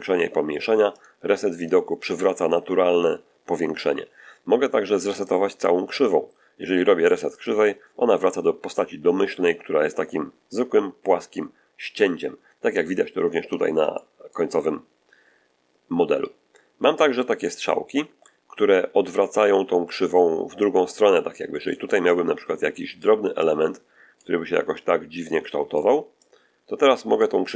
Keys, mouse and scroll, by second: 0.9 click, 1.5 click, 5.1 click, 7.3 click, 13.8 shift+middle click, 20.5-21.8 drag, 22.0 click, 23.3 click, 24.7-25.9 drag, 26.1-27.3 drag.